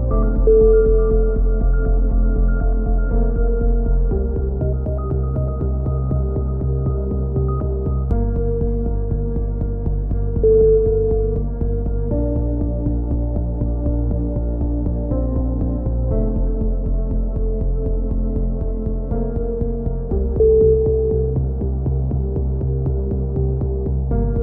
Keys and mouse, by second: 0.2 a, 0.9 middle click, 1.7 right click, 2.2 click, 4.1 a, 4.4 middle click, 4.7 Tab, 5.0 Tab, 8.4 ctrl+r, 11.1 middle click, 12.0 click, 13.0 right click, 14.4 c, 15.6 right click, 16.3 middle click, 16.6 right click, 17.6 ctrl+z, 18.0-19.5 drag, 20.6 c, 21.2-22.2 right drag, 22.2 middle click, 22.3 click, 23.8 a, 23.9-24.4 middle drag.